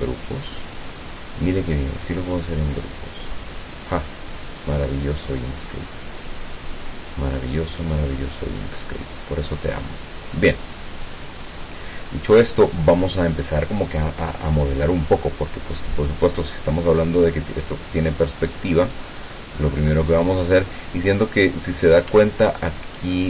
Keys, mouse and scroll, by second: 0.3 click, 1.0 click, 1.7 click, 2.3 click, 3.0 click, 3.5 click, 4.9 click, 5.5 click, 7.2 click, 8.9 click, 10.7-11.3 drag, 17.9 click, 18.9 click, 22.3-22.7 ctrl+scroll up 2.